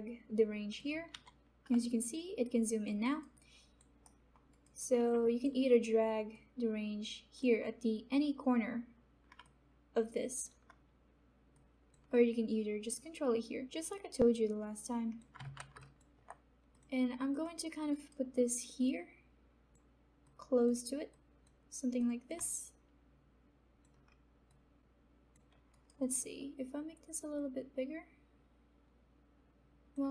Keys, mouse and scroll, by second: 1.7 f, 1.8 alt+click, 3.0 alt+right click, 3.3 alt+click, 4.0 alt+middle click, 4.8 alt+right click, 5.2 alt+click, 6.3-9.4 drag, 9.4-15.5 alt+drag, 15.5 ctrl+z, 15.8 alt+click, 17.9 alt+right click, 18.8-21.9 drag, 22.4-25.7 drag, 25.7 alt+right click, 26.2-30.1 alt+drag.